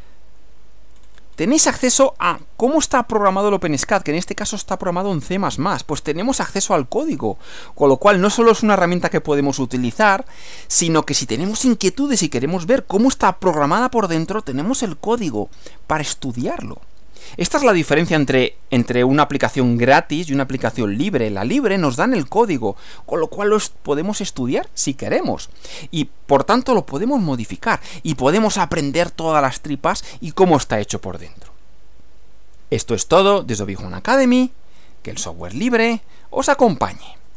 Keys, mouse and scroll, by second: 0.9-1.5 scroll down 2, 2.3 scroll down 2, 6.5 click, 8.2-8.7 scroll down 2, 10.4 scroll up 2, 15.3-15.6 scroll down 2, 35.3 click, 37.3 click.